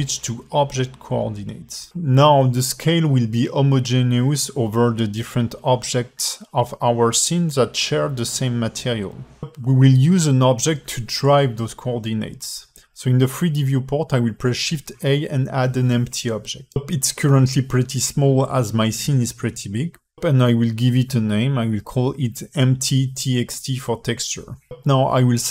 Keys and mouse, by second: 0.4-2.2 drag, 3.4 alt+middle click, 4.5 alt+middle click, 6.6 alt+shift+middle click, 8.9-9.7 alt+middle drag, 10.2 shift+a, 16.4 g, 17.9 alt+shift+middle drag, 19.2 alt+shift+middle drag, 21.4 click, 22.1-24.9 drag, 24.8 ctrl+c.